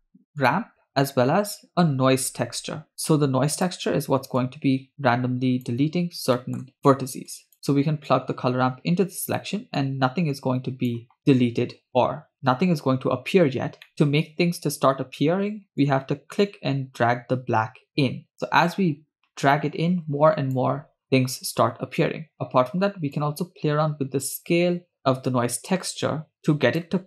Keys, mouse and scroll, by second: 1.2 shift+a, 4.4-5.7 drag, 6.4 middle click, 6.7 click, 7.3 drag, 8.1-9.4 drag, 9.8-11.0 drag, 15.8-20.6 drag, 21.0-21.5 scroll up 3, 23.2-26.9 drag.